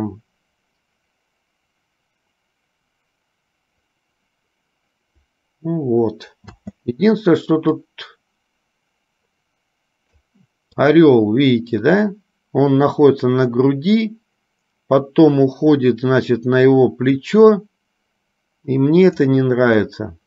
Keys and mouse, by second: 6.7 space, 8.0-10.3 drag, 11.1-19.5 drag.